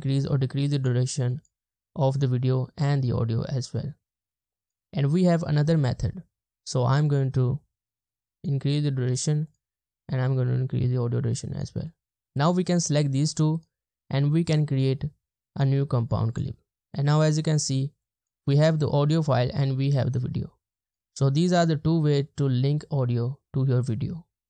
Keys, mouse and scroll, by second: 12.1 right click, 13.6 right click.